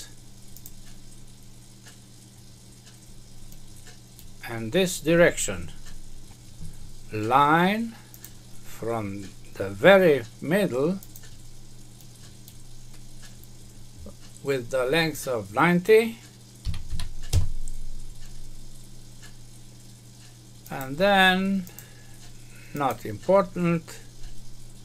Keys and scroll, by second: 17.2 Return.